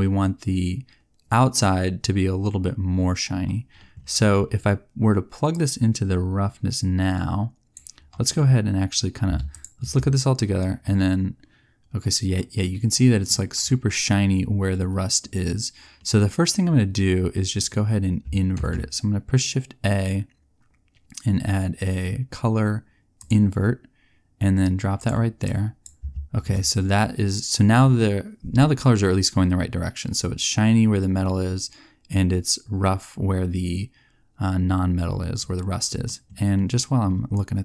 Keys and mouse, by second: 9.5 click, 18.5 shift+a.